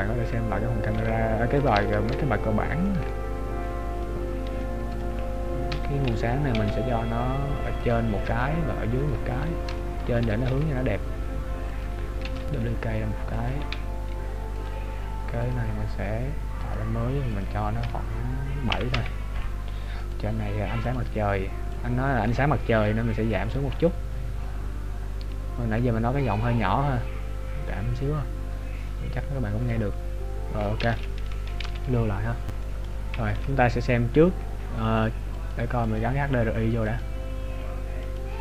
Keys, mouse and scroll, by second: 1.3 g, 2.4 ctrl+z, 3.0 middle click, 5.9 KP_7, 6.6 g, 8.4 KP_3, 9.0 KP_1, 9.9 shift+middle click, 10.5 g, 12.3 shift+d, 13.8 r, 15.6 click, 17.3 click, 20.1 right click, 20.9 click, 31.7 ctrl+s, 32.6 middle click, 33.4 KP_0, 35.9 click, 37.0 click.